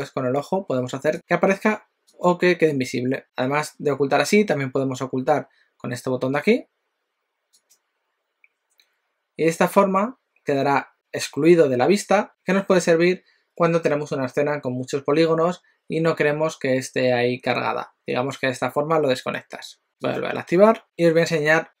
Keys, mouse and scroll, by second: 0.0 click, 1.1 click, 1.1 click, 2.0 click, 7.7 click, 20.1 click.